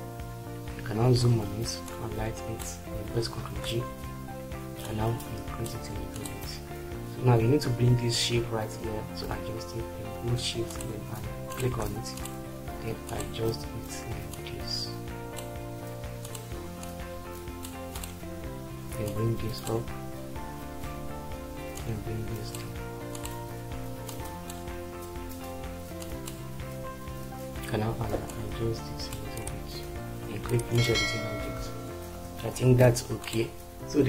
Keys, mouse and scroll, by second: 3.4 ctrl+g, 32.4 shift+F4.